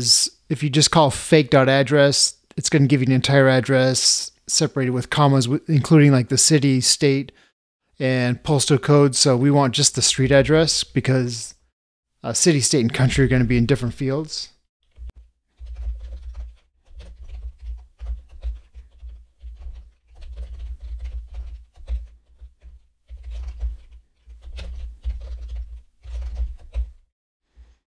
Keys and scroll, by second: 21.9 ctrl+space, 26.7 ctrl+space.